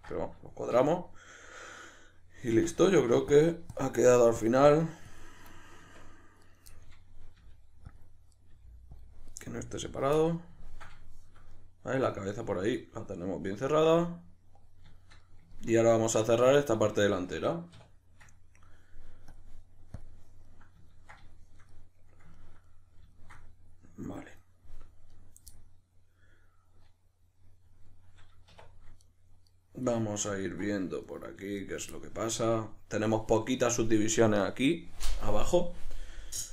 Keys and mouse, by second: 2.5 Tab, 3.3-5.5 shift+drag, 5.5 middle click, 5.8 Tab, 6.4 right click, 6.7-8.3 middle drag, 7.4 g, 8.0 click, 8.3 right click, 8.5 middle click, 8.5 g, 9.0 click, 9.3 right click, 9.4-19.3 middle drag, 9.4 g, 10.0 click, 17.7 \, 19.3-20.5 drag, 20.5-25.1 middle drag, 25.1 right click, 25.5-29.0 middle drag, 28.5 1, 29.0 right click, 29.5 right click, 29.9-31.1 middle drag, 31.1 right click, 31.6 right drag, 31.9-36.5 shift+middle drag.